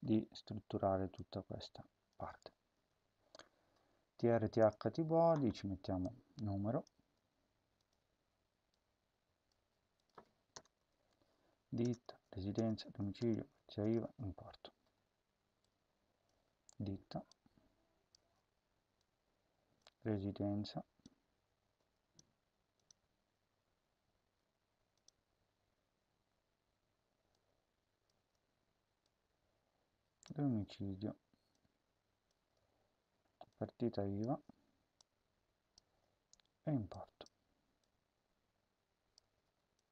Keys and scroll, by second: 2.8 Delete, 6.9 ctrl+c, 7.9 ctrl+v, 9.5 ctrl+c, 10.5 Return, 10.7 ctrl+v, 11.7 Return, 11.9 ctrl+v, 12.5 Return, 12.7 ctrl+v, 13.1 Return, 13.5 ctrl+v, 13.7 Return, 16.3 ctrl+c, 18.1 ctrl+v, 19.9 ctrl+c, 28.1 ctrl+c, 30.3 ctrl+v, 32.3 ctrl+c, 34.1 ctrl+v, 35.7 ctrl+c.